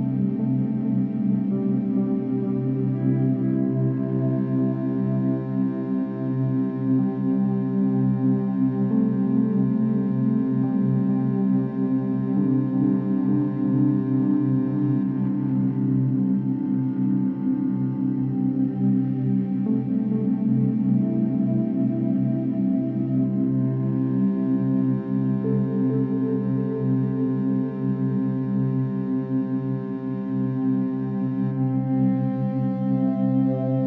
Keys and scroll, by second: 8.9 v, 12.0 ctrl+0, 13.9 ctrl+space, 17.1 space, 20.4 ctrl+0, 22.1 f, 24.0 Tab, 26.5 Tab.